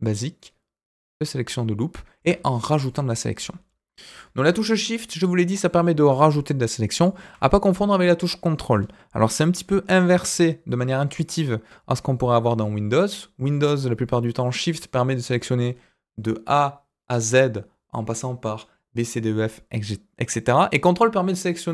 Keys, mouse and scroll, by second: 3.3 ctrl+z, 4.1 click, 4.8 shift+click, 6.0 shift+click, 6.9 shift+click.